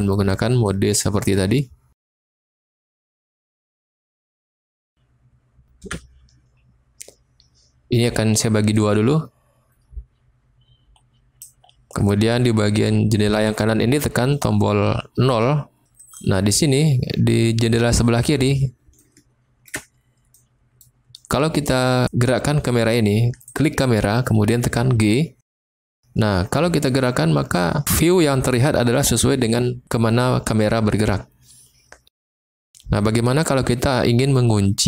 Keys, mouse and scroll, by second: 0.6-1.3 middle drag, 2.4-3.5 middle drag, 5.8 n, 8.9-11.4 drag, 15.3 KP_0, 19.0-19.3 shift+drag, 19.3 shift+middle click, 19.4 shift+click, 20.3 click, 20.5 middle click, 25.7 g, 32.4 click.